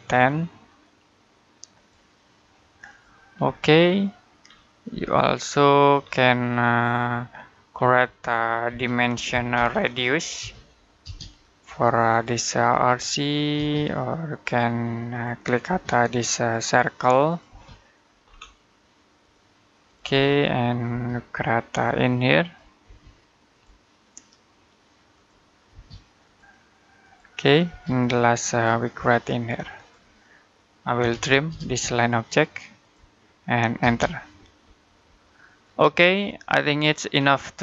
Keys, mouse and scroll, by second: 3.3 middle click, 4.2-4.7 scroll down 1, 4.7 middle click, 5.8-6.1 scroll down 1, 6.1 middle click, 7.6-8.5 scroll up 1, 8.5-10.9 typing, 11.9 click, 13.4 space, 14.1 click, 15.5 space, 16.3 click, 17.3 space, 18.1-19.0 scroll up 1, 19.0 click, 20.0 scroll down 1, 20.3 middle click, 20.7 space, 21.5 click, 22.7 space, 23.4 click, 25.5 space, 26.1 click, 27.5 space, 28.3 click, 30.8-31.3 typing, 32.6 click, 33.6 space, 34.2-34.9 scroll down 1, 34.9 middle click, 36.8-37.6 scroll up 1.